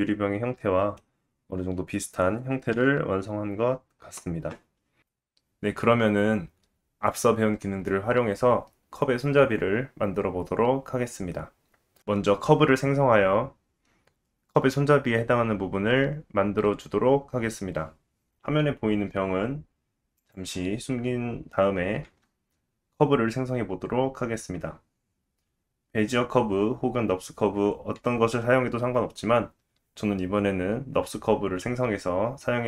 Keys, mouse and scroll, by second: 1.0-2.7 scroll down 1, 2.7-4.1 scroll down 1, 2.7 KP_1, 4.1 click, 5.0-16.7 middle drag, 5.1 scroll up 1, 16.7-20.3 drag, 20.3-25.1 middle drag, 22.1 shift+a.